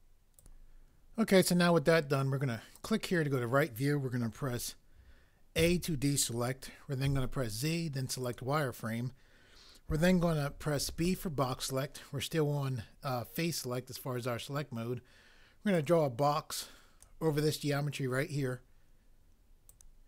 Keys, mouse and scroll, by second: 5.6 a, 7.1 z, 10.8 b.